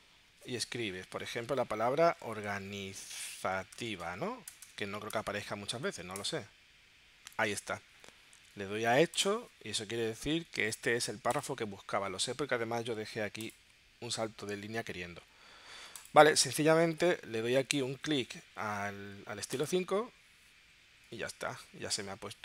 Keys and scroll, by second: 1.4 o, 3.3 BackSpace, 6.2 Return.